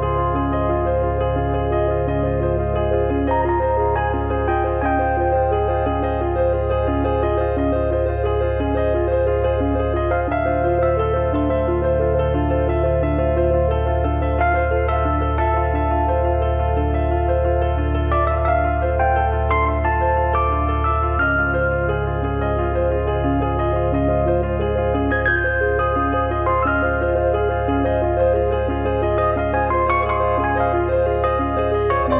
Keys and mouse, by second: 0.5 click, 3.4 click, 6.7 3, 7.0 click, 11.0 Delete, 12.7 2, 13.0 click, 13.7 1, 15.1 click, 15.5 click, 17.5 click, 19.5 click, 21.1 click, 22.5 click, 24.7 click, 26.3 click, 27.9 click, 29.9 click, 31.6 click.